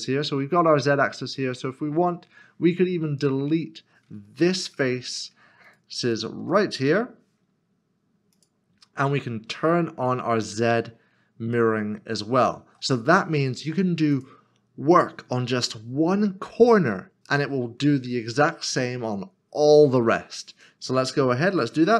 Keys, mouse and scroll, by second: 1.4 middle click, 4.4 3, 4.7 click, 5.6 shift+click, 6.9 x, 9.0 click, 10.4 click, 11.5 click, 11.7 middle click, 14.1 click, 16.8 scroll up 1.